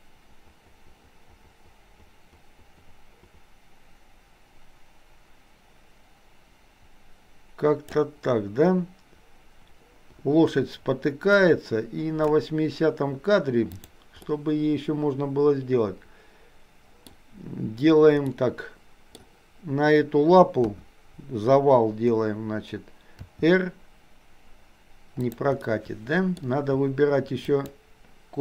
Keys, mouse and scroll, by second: 11.5-12.5 drag, 13.9 click, 14.3-17.1 middle drag, 18.3-19.3 middle drag, 20.6 KP_1, 23.1 r, 25.6 middle click, 27.5 shift+click.